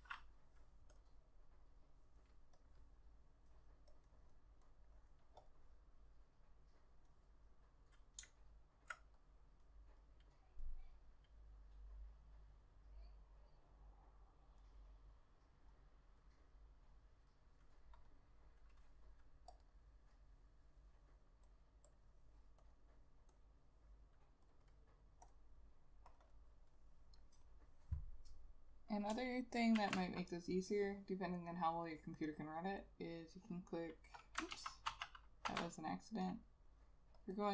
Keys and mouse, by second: 4.2 double click, 8.5 alt+click, 18.3 double click, 26.4 double click, 29.9 ctrl+s, 32.9 right click, 34.6 ctrl+z, 35.0 ctrl+z, 35.6 ctrl+z, 36.5 double click.